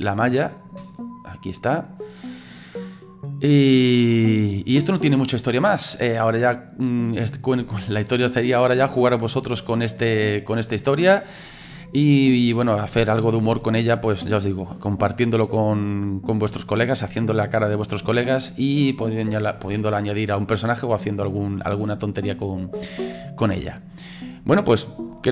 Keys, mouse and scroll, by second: 0.0 middle click, 1.0-1.3 scroll up 3, 1.3-3.4 middle drag, 3.4-5.9 drag, 6.2 middle click, 6.7-8.0 scroll down 4, 8.0 click, 8.7-10.8 middle drag, 10.8 click, 11.3-22.0 middle drag, 22.0 right click, 22.6-25.3 middle drag.